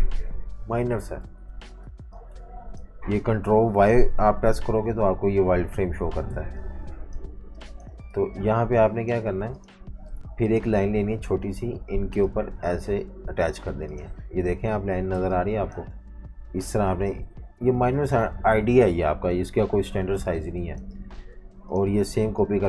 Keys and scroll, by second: 1.4 super+y, 1.8-3.2 typing, 4.5 super+y, 6.3-9.3 typing, 13.6 typing, 15.1-15.9 typing, 19.4 super+-, 19.6 super+-, 20.3 space, 20.8 space.